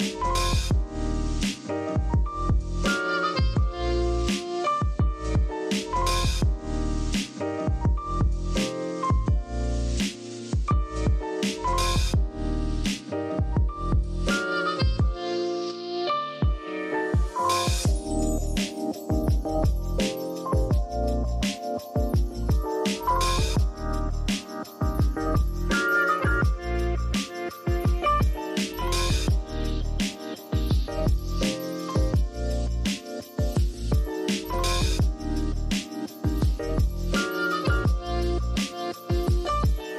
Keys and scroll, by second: 0.0-1.0 typing, 2.3 i, 2.9 v, 6.5-8.2 typing, 9.9 p, 12.3 super+z, 18.9-19.8 typing, 22.1 super+x, 23.3 super+v, 24.5 super+[.